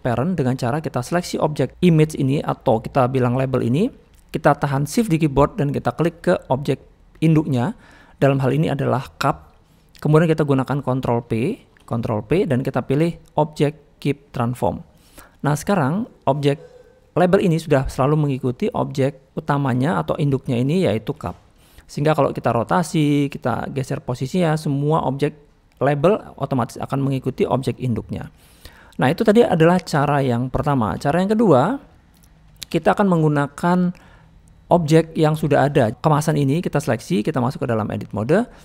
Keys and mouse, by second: 3.8 middle click, 7.1 shift+click, 15.4 middle click, 15.9 click, 16.4 middle click, 17.3 middle click, 18.5-19.3 drag, 20.5 click, 22.5 click, 23.4-24.4 drag, 27.2 shift+middle click, 28.1 middle click, 29.7 shift+middle drag, 30.2-30.5 middle drag, 30.7 shift+middle drag, 32.1 shift+middle click, 32.5 shift+middle click, 34.0 middle click, 37.5-38.3 drag.